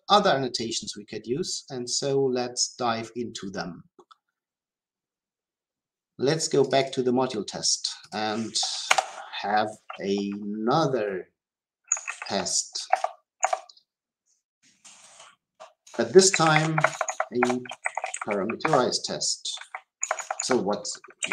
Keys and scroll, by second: 12.8 Return, 18.6 Return.